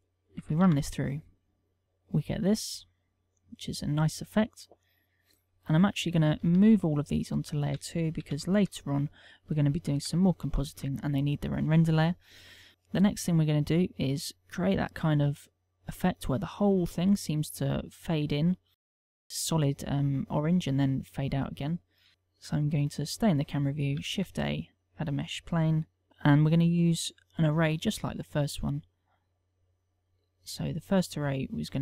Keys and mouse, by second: 0.3 click, 1.3 alt+a, 1.8 click, 1.9 alt+a, 4.6 click, 7.2 shift+click, 7.6 shift+click, 8.1 shift+click, 8.9 m, 10.7 1, 11.2 shift+2, 23.9 right click, 24.7 shift+a, 28.3 s, 29.1 click, 30.0 click, 30.5 click, 31.1 click.